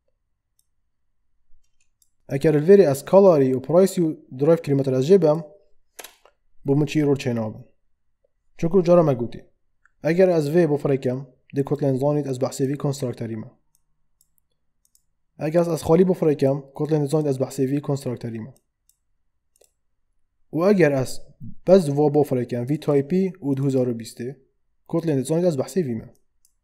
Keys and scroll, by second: 5.9 BackSpace.